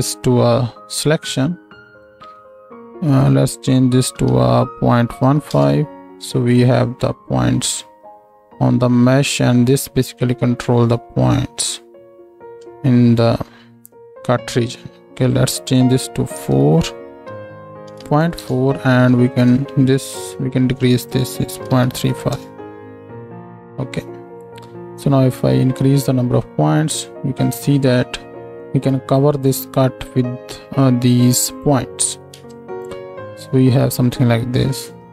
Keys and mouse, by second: 32.3 ctrl+space, 34.9 middle click.